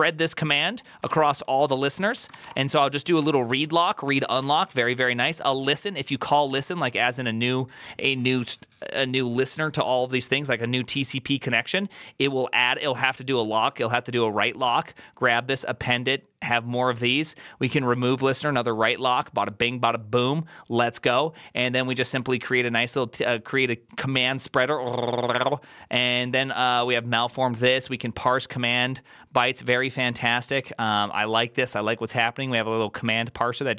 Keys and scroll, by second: 0.0-7.4 typing.